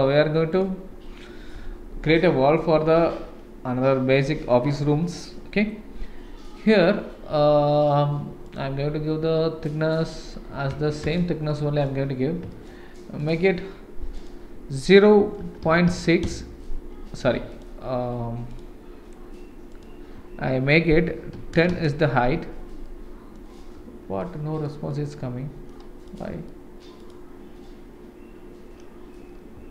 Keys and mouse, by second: 0.5 click, 1.6 n, 8.5-11.2 drag, 11.5-11.9 middle drag, 12.5 shift+middle click, 14.2-16.9 drag, 17.6 click, 19.7-22.4 drag, 22.9-23.3 middle drag, 24.2-24.7 middle drag, 24.9-25.7 middle drag, 26.1 click, 26.5-26.8 middle drag, 27.0 click.